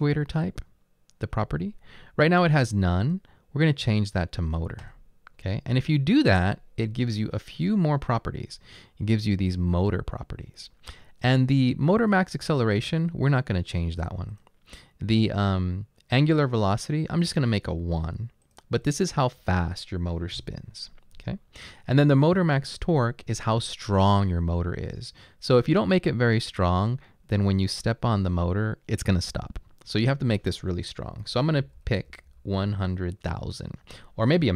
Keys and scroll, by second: 19.4 1, 22.4 typing, 31.5-32.6 typing.